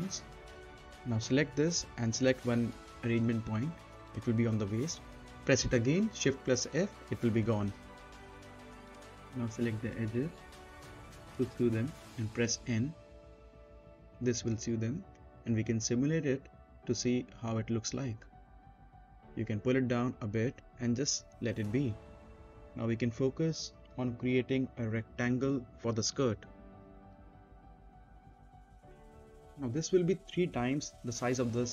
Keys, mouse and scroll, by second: 0.5-2.6 right drag, 2.9 click, 5.0 right click, 5.5 scroll down 1, 5.9 right click, 6.0 right click, 7.0 shift+f, 7.3 right click, 8.0-8.4 scroll down 1, 8.4 middle click, 8.8 scroll down 1, 8.9-10.4 middle drag, 11.2 middle click, 11.2 n, 12.2 click, 14.6 click, 16.8 right click, 17.5 space, 19.9-22.2 drag, 22.7-23.0 scroll down 1, 23.0 middle click, 24.4 click, 24.9 scroll up 1, 25.2 middle click, 26.3-28.3 drag, 28.8 middle click, 29.8 z, 30.4 scroll down 1, 30.7 middle click, 31.4 click.